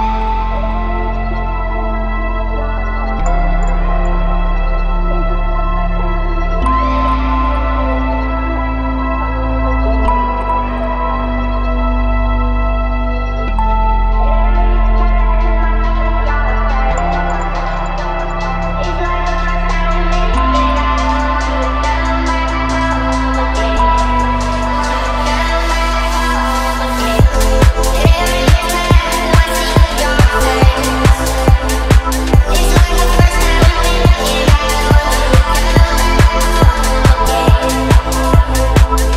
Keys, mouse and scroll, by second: 3.2 click, 4.2 click, 5.9 click, 8.2 drag, 9.5 g, 11.1 click, 12.5 click, 14.8 click, 15.1-16.1 middle drag, 16.8-17.1 scroll down 2, 17.1 middle drag, 17.7 click, 18.1 click, 18.5 shift+a, 21.5 s, 21.7 KP_5, 22.0 KP_Enter, 23.1 r, 23.5 KP_9, 23.6 KP_0, 24.5 x, 25.2 KP_Enter, 26.9 shift+Tab, 27.4 g, 28.3 y, 29.6 right click, 30.3 shift+Tab, 31.6 g, 32.0 y, 35.0 click, 36.1 click, 36.4-36.7 middle drag, 36.9 shift+a.